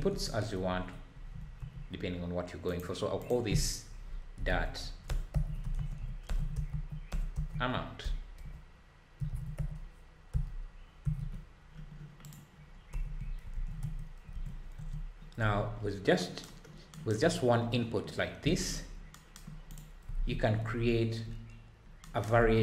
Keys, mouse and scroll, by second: 1.6 n, 12.2 click, 12.9 n, 22.4 ctrl+s.